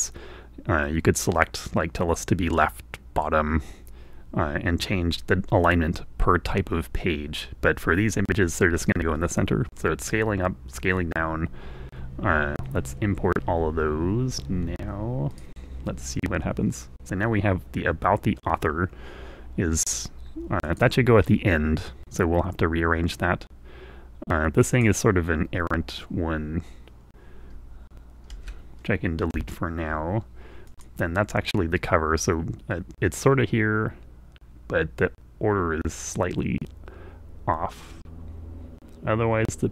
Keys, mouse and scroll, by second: 14.4-15.8 drag, 20.8 click, 25.1 click, 29.6 Delete, 31.0 click.